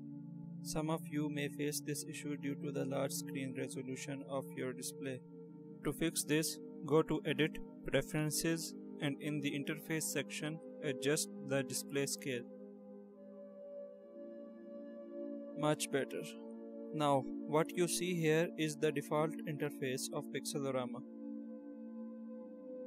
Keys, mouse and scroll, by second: 6.1 click.